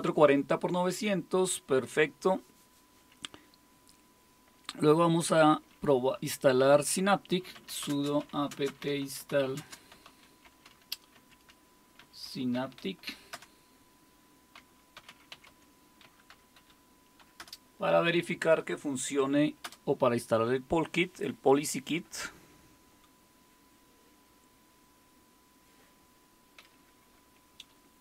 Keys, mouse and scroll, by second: 7.2-17.9 typing, 19.6 typing.